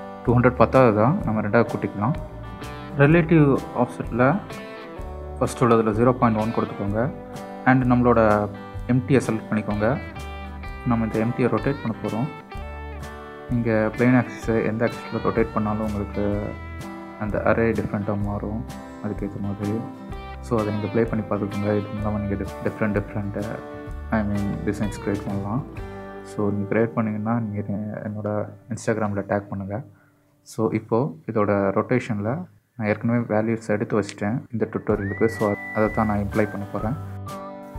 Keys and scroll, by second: 20.6 r, 21.3 z, 25.8 x, 28.7 y.